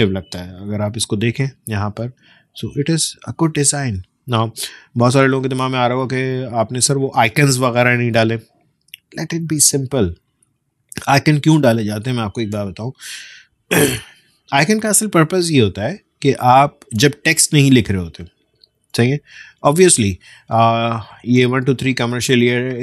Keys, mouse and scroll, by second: 0.4 ctrl+space, 0.6 ctrl+;, 1.4 space, 1.7 click, 1.9 space, 2.5 alt+scroll up 1, 3.2 space, 3.5 click, 3.8 space.